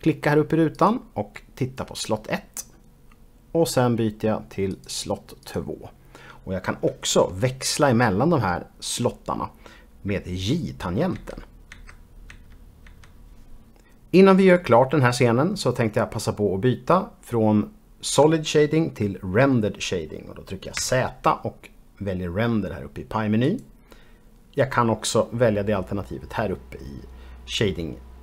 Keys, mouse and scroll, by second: 2.3 click, 3.3 click, 6.2 click, 6.9 click, 11.5-14.1 typing, 15.8-16.4 scroll up 1, 16.4-18.1 scroll up 1, 20.7 z, 23.4 click.